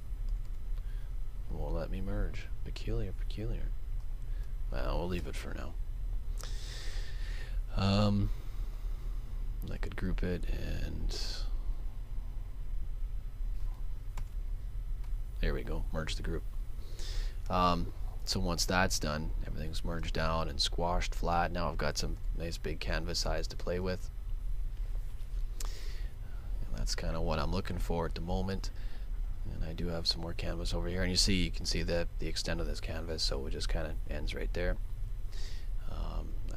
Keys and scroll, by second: 5.2 super+g, 14.1 super+e, 23.8 super+z, 34.4 super+z.